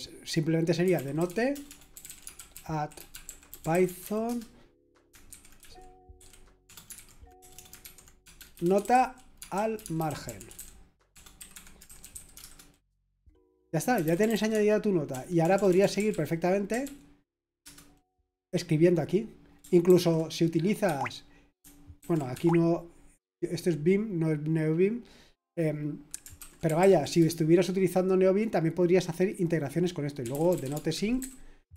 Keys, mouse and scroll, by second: 0.6-12.9 typing, 11.5 Escape, 14.0-18.1 typing, 19.9 ctrl+p, 22.0 Escape, 26.1-27.3 typing, 29.9-31.7 typing.